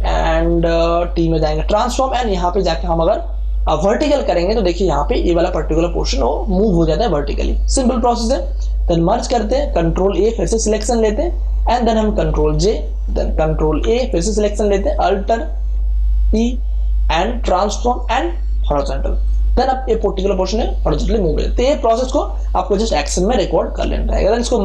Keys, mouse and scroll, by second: 4.7 click, 9.1 ctrl+e, 10.1 ctrl+a, 12.5 ctrl+j, 13.8 ctrl+a, 16.3 click, 23.2 click, 24.2 ctrl+e.